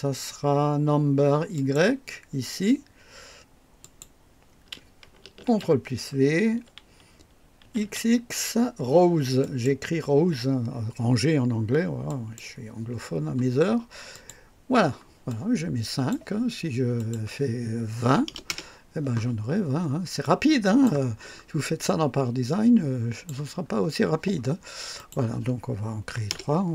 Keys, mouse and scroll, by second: 1.5 click, 3.8 click, 5.4 ctrl+v, 7.6-8.3 typing, 9.4 click, 12.0 click, 14.1 click, 15.2-16.3 drag, 16.9 click, 18.0 KP_2, 18.2 KP_0, 18.5 Return, 19.5-20.2 scroll down 2, 20.2-21.0 drag, 21.1 scroll down 1, 21.1 typing, 21.8-23.4 drag, 23.6 scroll up 1, 24.9 click, 26.1 KP_3, 26.2 Return.